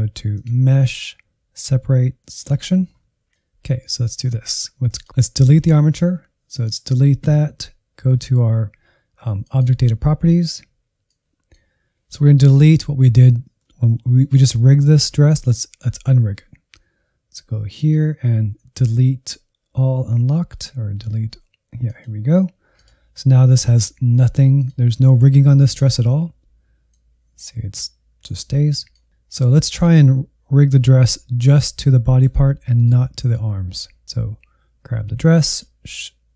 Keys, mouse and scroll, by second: 4.8 click, 6.6-13.6 drag, 13.6-17.7 middle drag, 17.7-29.1 drag, 29.6 click, 31.0-32.8 middle drag, 32.8-34.0 drag, 35.4-36.3 shift+drag.